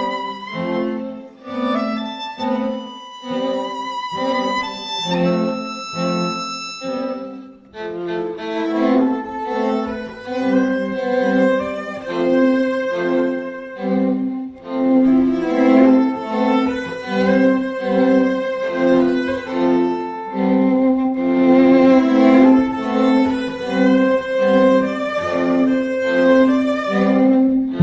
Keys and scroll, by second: 15.9 ], 18.8 [.